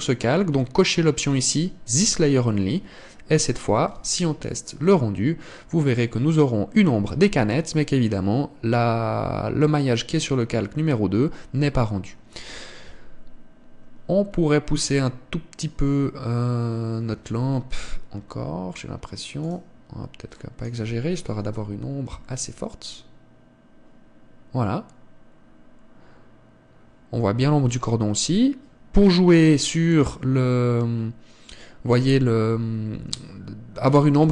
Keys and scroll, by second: 18.1 Escape.